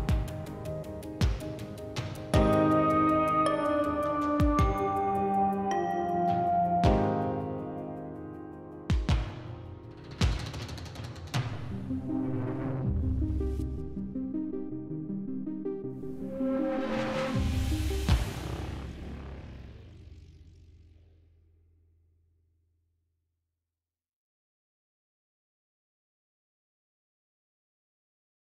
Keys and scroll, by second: 0.5 s, 6.9 s, 11.6 s, 18.4 shift+s, 23.9 shift+s.